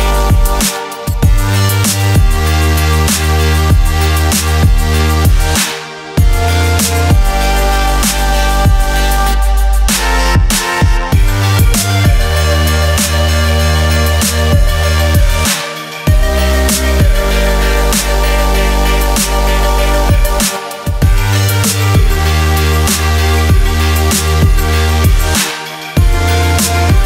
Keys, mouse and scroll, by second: 3.1 Escape, 4.2 click, 5.9 click, 6.5 alt+click, 8.4 click, 9.9 click, 11.6 click, 13.1 click, 14.7 click.